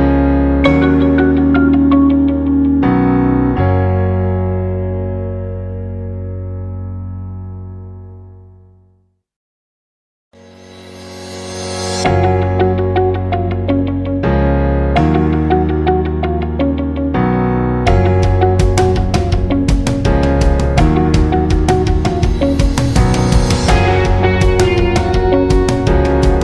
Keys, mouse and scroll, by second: 5.8 alt+scroll up 1, 6.0 space, 6.2 click, 6.6 alt+scroll up 1, 6.8 space, 7.1 click, 7.4 space, 8.3-14.6 drag, 14.6 alt+scroll down 1, 14.8 space, 15.0 click, 15.3 space, 16.2 click, 17.1 alt+scroll down 2, 17.3 space, 17.5 click, 17.8 space, 18.3 alt+scroll down 1, 18.5 space, 18.6-23.9 drag, 23.9-25.1 alt+shift+drag, 25.4 alt+scroll up 1, 25.7 space, 25.9 click, 26.3 alt+scroll down 1.